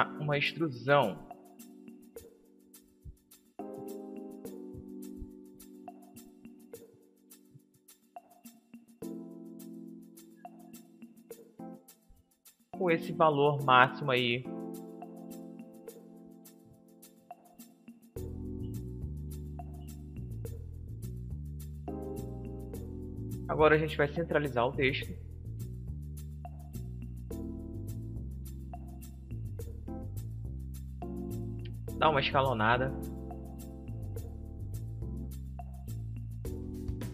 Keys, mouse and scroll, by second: 1.7-4.1 middle drag, 4.3-8.6 drag, 9.5 BackSpace, 12.1-14.0 drag, 14.3 BackSpace, 19.4-23.9 middle drag, 24.1-26.0 drag, 25.7-27.7 middle drag, 30.2 s, 33.9-36.0 drag, 35.8-37.1 middle drag.